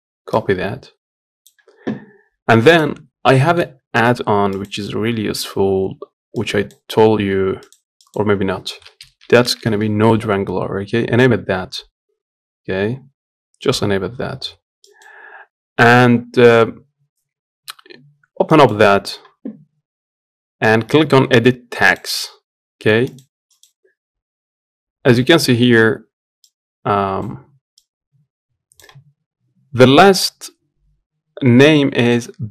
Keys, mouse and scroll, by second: 5.2-28.0 drag.